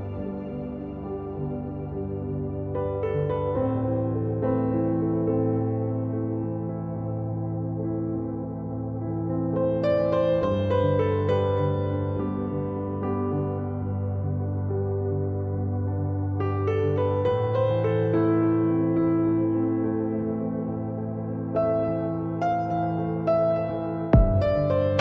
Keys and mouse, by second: 1.2 z, 3.8 ctrl+r, 6.9 ctrl+r, 12.2 Tab, 15.3 click, 18.8 Tab, 19.9 ctrl+r, 21.6 Tab.